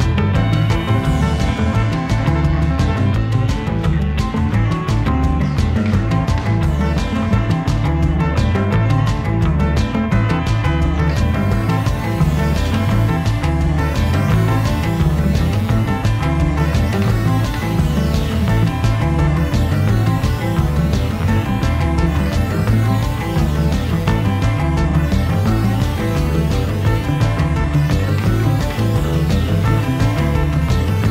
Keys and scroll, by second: 0.0 f, 1.2 f, 2.6 v, 14.1 a, 16.3 super+j, 18.2 v, 29.7 Up.